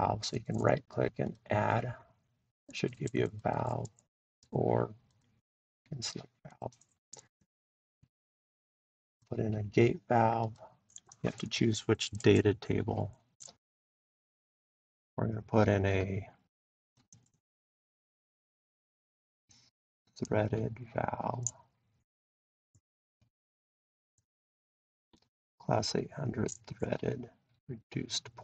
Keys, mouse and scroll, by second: 0.3 click, 1.3 click, 3.5 right click, 5.5 click, 6.6 click, 9.2 click, 10.6 click, 14.3-15.6 drag, 16.9-22.0 drag.